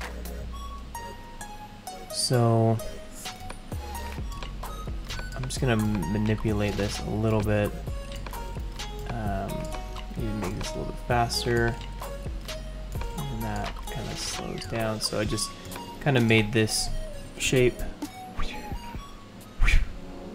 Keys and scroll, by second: 17.5 ctrl+0.